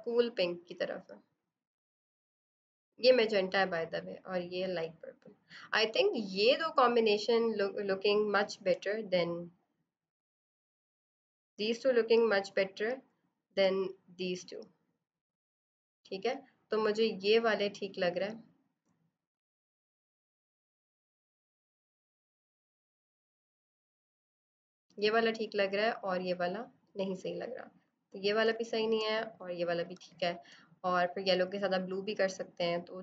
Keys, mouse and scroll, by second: 3.5 click, 7.3 click, 8.6 b, 9.9 right click, 10.5 click, 20.1 click, 21.2 click, 28.4 space, 28.5 click, 29.8 space, 30.0 click, 30.3 space.